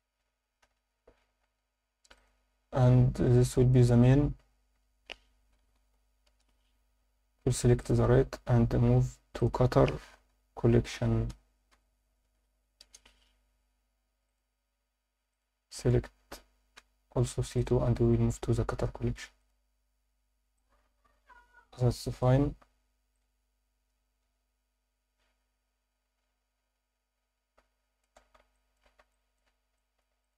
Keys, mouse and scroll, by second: 0.6 alt+h, 2.1 click, 3.4 click, 7.8 click, 8.8-10.8 scroll down 1, 8.8 m, 10.8 t, 15.3 click, 18.0-19.2 scroll down 2, 19.6 click, 20.0 scroll up 2, 20.5-22.2 alt+middle drag, 23.1-28.0 alt+middle drag, 28.5 alt+shift+middle drag, 29.1 ctrl+alt+middle drag, 29.8 alt+middle drag, 30.2 click.